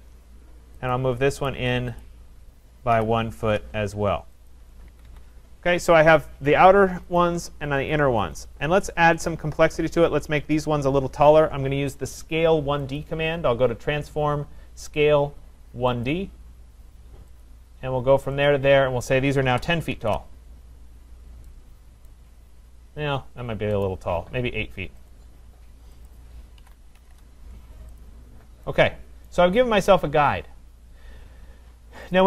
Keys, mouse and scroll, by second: 0.0 click, 0.9 click, 1.5 right click, 2.1 click, 3.0-3.4 typing, 3.4 Return, 4.5 click, 4.9 Escape, 5.1 Escape, 6.3 click, 7.2 click, 7.9 click, 8.4 click, 9.3 click, 11.1 click, 13.0 click, 16.1 click, 17.4 click, 18.5 click, 19.2-20.4 typing, 20.9 scroll, 22.1 right click, 22.4-23.5 scroll, 23.5 scroll, 23.9 right click, 25.1 click, 26.1 click, 26.6-27.0 typing, 27.1 Return, 28.0 click, 28.7-29.0 scroll, 29.3 right click, 32.2 click.